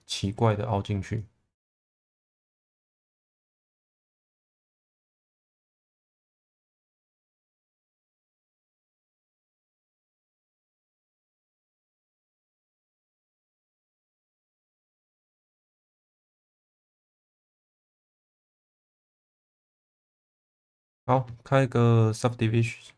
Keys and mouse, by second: 0.2 click, 2.1 click, 4.5 click, 5.7 shift+middle click, 6.6 2, 9.6 1, 9.8 click, 12.1-14.4 middle drag, 15.4 alt+middle click, 17.0 click, 18.0-20.5 middle drag, 20.7 ctrl+s.